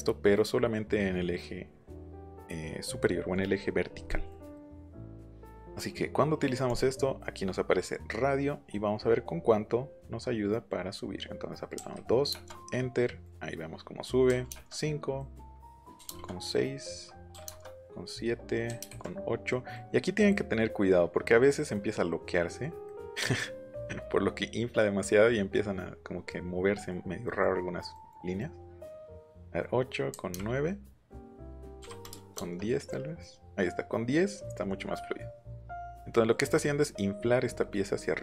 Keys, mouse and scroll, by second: 4.0 middle click, 4.5 middle click, 5.0 middle click, 5.5-5.9 scroll up 1, 6.6 click, 11.7 KP_2, 12.3 KP_Enter, 13.0 click, 14.2 KP_5, 14.5 KP_Enter, 15.2 click, 15.9 KP_6, 16.0 KP_Enter, 17.3 KP_7, 17.4 KP_Enter, 18.6 KP_8, 18.8 KP_Enter, 19.5 click, 26.7 middle click, 27.2 middle click, 30.1 KP_9, 30.2 KP_Enter, 31.0 click, 31.7 KP_1, 32.1 KP_0, 32.4 KP_Enter, 32.8 click, 35.4 middle click, 36.1 middle click, 38.1 middle click.